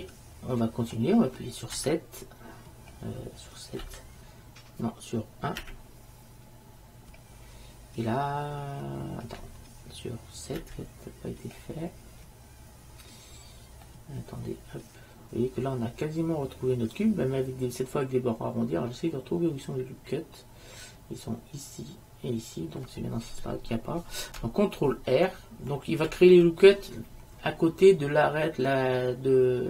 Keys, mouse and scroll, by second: 1.9 KP_7, 3.9 KP_7, 5.7 KP_1, 10.7 KP_7, 14.9-16.0 middle drag, 26.2 ctrl+r.